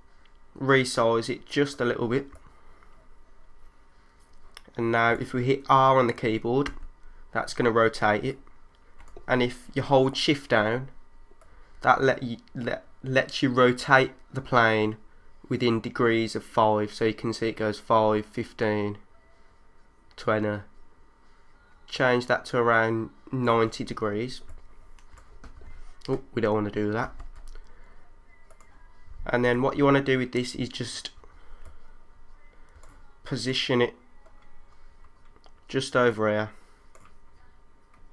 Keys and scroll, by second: 2.3 3, 6.7 r, 8.2-9.0 typing, 26.5 super+3, 27.0 super+z, 29.5 3, 32.6 3.